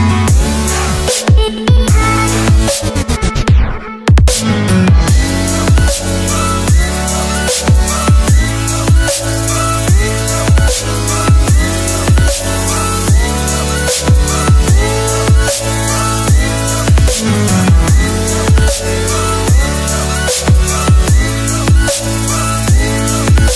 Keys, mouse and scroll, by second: 13.0 ctrl+t, 14.5 click, 18.9 Return, 20.1 Up, 20.8 Right, 21.5 Up, 22.7 click.